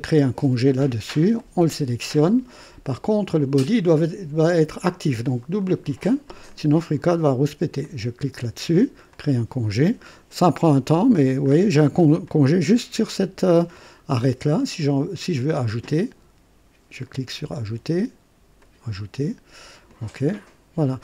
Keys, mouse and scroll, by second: 1.3 click, 2.6-3.1 scroll up 2, 5.3 click, 6.4 click, 7.7 click, 9.1 click, 11.4-12.2 scroll up 2, 12.2-14.4 drag, 15.1 click, 16.9 click, 18.5 click, 19.8 click.